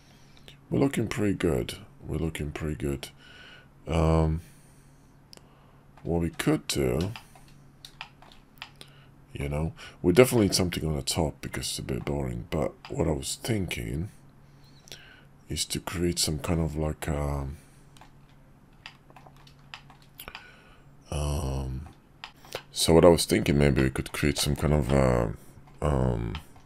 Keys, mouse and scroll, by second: 6.2 `, 7.1 shift+middle drag, 8.0 shift+middle drag, 8.6-9.4 middle drag, 10.3-12.0 middle drag, 12.8-18.0 middle drag, 18.8-19.2 middle drag, 19.7 shift+middle drag, 20.3-21.9 middle drag, 22.2 shift+middle drag, 23.5 middle drag, 24.1 shift+middle click, 24.6-25.4 middle drag, 26.0 shift+middle drag, 26.4 middle click.